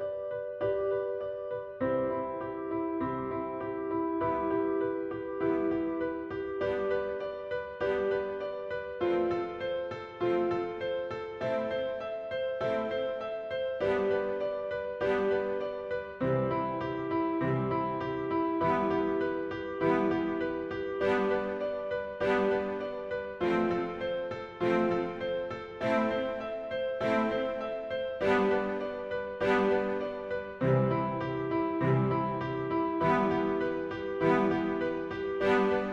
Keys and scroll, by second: 0.1 shift+Tab, 0.2 shift+a, 4.1 shift+space, 7.3 shift+Tab, 8.1 shift+g, 9.9 shift+g, 12.1 shift+g, 13.1 shift+g, 14.6 shift+g, 16.8 shift+g, 18.8 shift+g, 20.6 shift+g, 26.8 shift+g, 29.7 shift+Tab, 30.4 shift+Tab, 31.5 shift+d, 31.8 shift+Home, 32.1 shift+Tab, 33.2 shift+g, 34.8 shift+g.